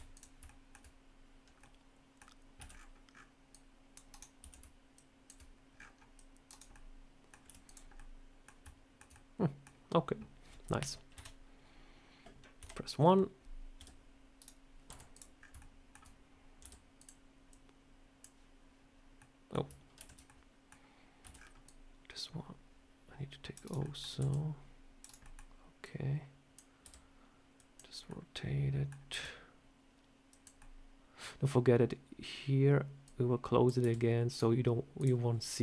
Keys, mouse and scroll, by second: 0.0 click, 0.3 shift+middle click, 1.5 middle click, 2.5 c, 4.3 c, 6.6 middle click, 7.3 z, 7.8 scroll up 1, 7.8 middle click, 8.5 shift+middle click, 9.0 middle click, 11.0 KP_3, 12.5 KP_1, 13.6 r, 14.7 z, 15.2 scroll up 3, 15.4 shift+middle click, 16.5 r, 17.4 click, 19.0 middle click, 19.9 ctrl+z, 20.1 middle click, 21.1 c, 23.7 middle click, 24.0 c, 25.1 middle click, 25.7 click, 26.7 r, 28.0 middle click, 29.0 r, 30.4 middle click, 32.9 click, 33.7 r, 34.8 click.